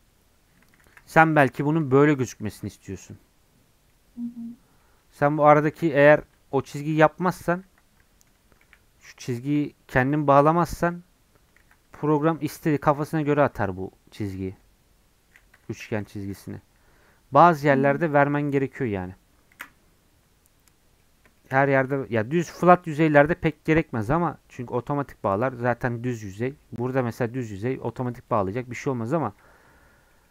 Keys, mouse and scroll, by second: 0.8 ctrl+z, 1.3 1, 1.7 click, 2.5 j, 2.8 middle click, 3.1 Tab, 3.9-5.6 middle drag, 5.6 ctrl+z, 5.9 ctrl+z, 8.0 Tab, 8.5 Tab, 8.6 1, 9.1 click, 9.3 middle click, 10.2 shift+click, 10.8 j, 11.6 ctrl+z, 12.2 click, 13.1 j, 16.4 middle click, 16.8-17.1 scroll down 11, 17.3-17.9 scroll up 5, 17.9 click, 18.2-19.5 middle drag, 19.5 KP_Decimal, 20.8 middle click, 21.7 click, 21.9 scroll up 2, 22.2-24.0 scroll down 2, 24.0-24.4 scroll up 1, 24.4-24.8 scroll down 1, 24.8 Tab, 26.3 scroll up 2, 28.1 click, 28.4 click, 28.8-30.3 middle drag.